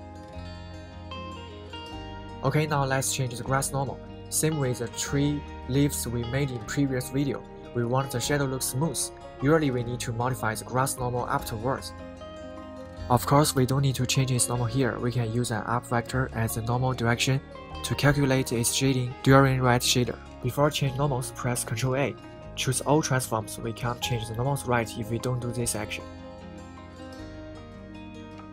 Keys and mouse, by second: 5.9-6.5 middle drag, 7.2-7.9 middle drag, 8.0 middle click, 8.9 middle click, 10.8 middle click, 11.7 middle click, 12.3 KP_1, 14.1-14.8 middle drag, 18.5 middle click, 20.6 ctrl+a, 26.5 Tab, 27.6 a.